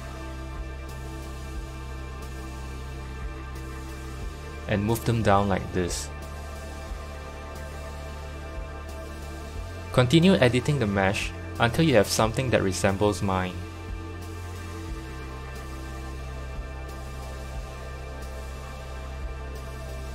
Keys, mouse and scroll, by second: 1.5 click, 3.2 click, 4.7 g, 8.5 KP_3, 9.4-10.9 shift+middle drag, 10.9 click, 11.6 g, 14.7-17.9 drag, 18.6 g.